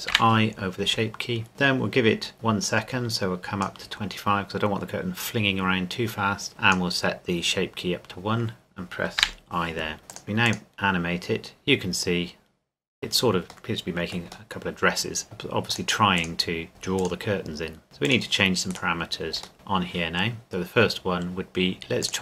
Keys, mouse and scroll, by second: 1.5 click, 6.5 click, 10.1 click, 14.5 middle click, 15.7 click, 18.7 right click, 19.5 Tab, 20.4 click.